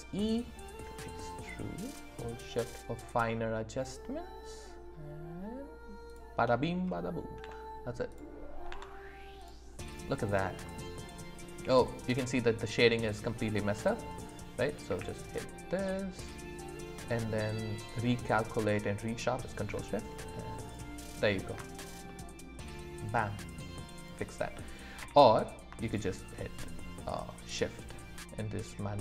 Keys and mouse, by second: 6.1 shift+click, 7.4 Tab, 10.6 middle click, 14.9 q, 22.1-23.7 middle drag, 24.0 click, 25.0 q.